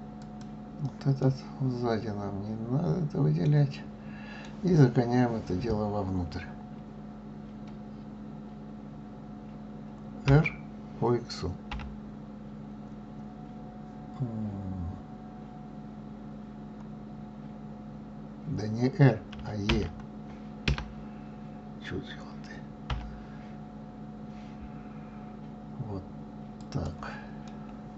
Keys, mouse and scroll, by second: 0.2 click, 1.2-4.2 middle drag, 10.3 r, 22.9 e, 27.5-27.9 middle drag.